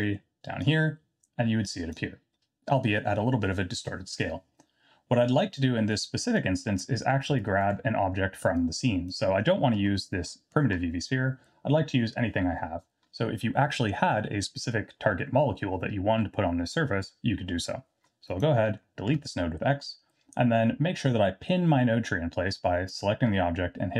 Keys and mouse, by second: 0.6-1.9 drag, 6.4-6.8 drag, 7.5 ctrl+right click, 8.6-9.1 drag, 19.1 x.